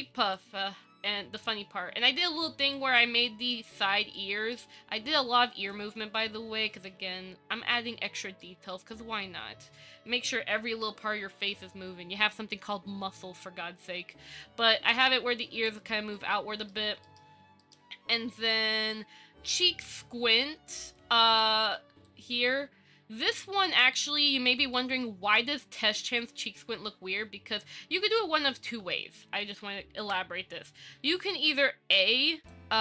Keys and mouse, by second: 0.6 click, 3.0 click, 4.4-4.7 middle drag, 4.9-5.3 shift+middle drag, 7.5 KP_5, 8.6 shift+middle click, 10.9 KP_5, 14.7-15.9 drag, 16.4-16.9 middle drag, 17.2 shift+middle click, 17.8 middle click, 18.7-19.1 drag, 19.9 KP_1, 22.3 click, 23.1-24.4 middle drag, 24.9 shift+middle click, 29.0 Tab, 29.3 a, 30.2 ctrl+v.